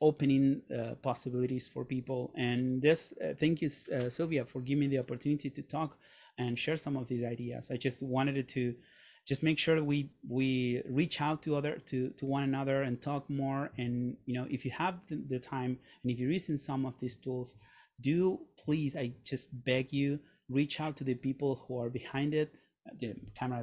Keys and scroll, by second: 17.8 shift+1, 18.2 shift+2, 18.9 shift+1, 19.3 shift+2.